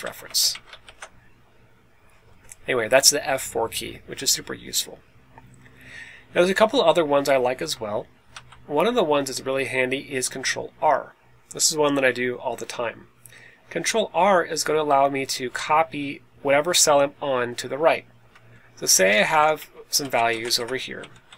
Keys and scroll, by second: 0.1 BackSpace, 0.4 Right, 0.7 shift+4, 2.2 Escape, 7.1 Left, 7.5 Left, 8.2 Down, 15.0 Right, 15.4 Right, 18.7-20.2 typing, 20.0 Right, 20.3 Tab, 20.9 Right, 21.2 Left, 21.3 Left.